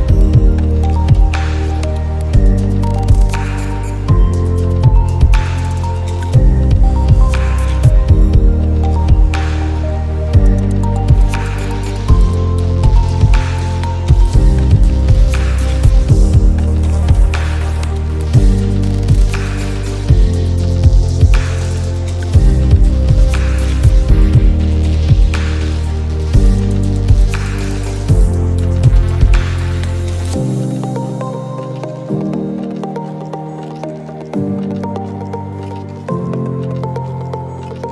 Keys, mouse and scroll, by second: 0.3 click, 3.1 click, 5.0-7.3 drag, 7.8 ctrl+[, 8.1 right click, 10.7 click, 11.7 ctrl+shift+[, 11.8 ctrl+shift+], 12.8 click, 13.9 ctrl+shift+], 14.3 click, 14.7 space, 14.9 space, 15.0 click, 15.4 click, 15.6 alt+scroll up 1, 16.6 alt+scroll down 1, 16.9 space, 17.5 alt+scroll down 1, 17.9-18.3 drag, 19.3 right click, 19.6 click, 20.2 click, 20.8 alt+shift+click, 21.2-21.9 alt+scroll up 2, 23.5-26.5 drag, 30.4 click, 31.5-34.1 shift+drag, 36.5-37.9 drag.